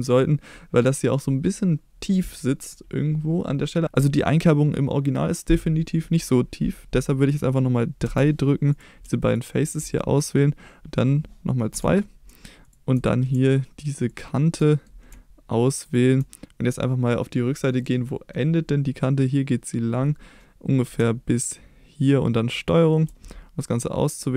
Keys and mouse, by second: 8.0 3, 9.3 shift+click, 10.1 middle click, 11.7 2, 13.0 middle click, 14.1 shift+click, 14.7 middle click, 15.9 shift+click, 17.0 middle click, 17.8 middle click, 22.5 ctrl+click, 23.2-24.2 middle drag.